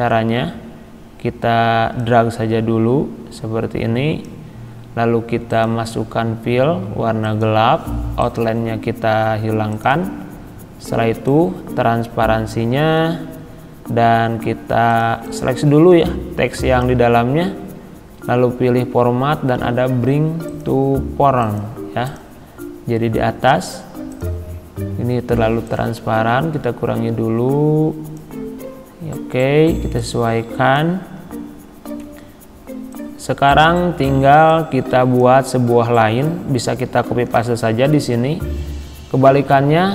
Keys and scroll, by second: 37.2 ctrl+c.